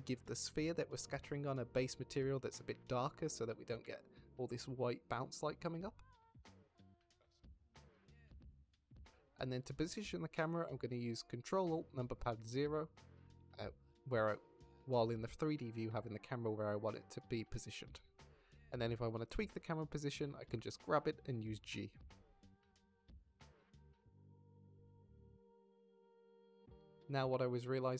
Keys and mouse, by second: 0.2 shift+middle drag, 0.9 middle click, 5.0 middle click, 7.6 middle click, 8.9 middle click, 9.0 z, 9.0 shift+a, 12.8 ctrl+alt+KP_0, 17.6 click, 19.2 click, 20.9 g, 22.9 shift+click, 23.3 g, 23.6 z, 23.8 z, 24.7 shift+click, 25.1 click, 25.5 z, 27.3 click.